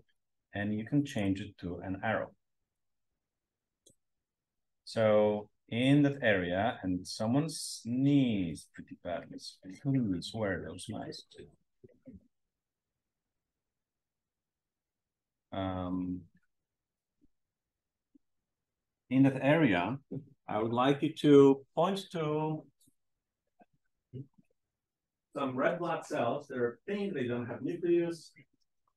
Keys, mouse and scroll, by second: 5.3-7.1 scroll up 1, 7.1-9.3 scroll down 1, 12.6 m, 13.1-13.7 drag, 13.1-13.7 scroll down 2, 13.9-14.7 drag, 14.7-15.3 scroll down 1, 15.3-15.7 drag, 16.5-18.0 scroll up 4, 17.8-18.4 drag.